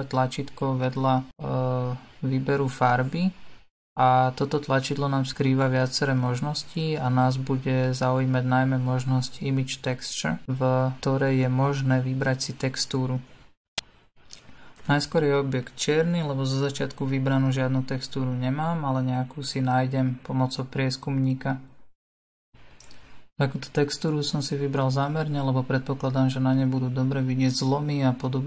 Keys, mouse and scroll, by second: 19.5-20.9 drag, 25.8-28.4 middle drag.